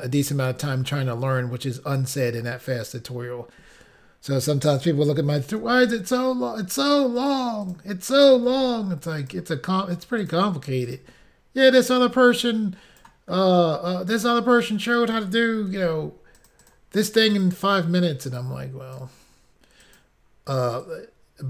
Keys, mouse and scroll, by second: 5.7 ctrl+r, 7.2 click, 7.4 click, 7.7 click, 7.8 double click, 8.5 ctrl+r, 9.4 click, 10.3 click, 10.4 click, 10.9 click, 11.0 click, 11.7 click, 15.8 ctrl+r, 16.5 click, 16.6 click, 16.7 click, 16.8 double click, 17.4 double click, 17.5 double click, 18.2 double click, 19.9 click, 20.1 click, 20.9 click.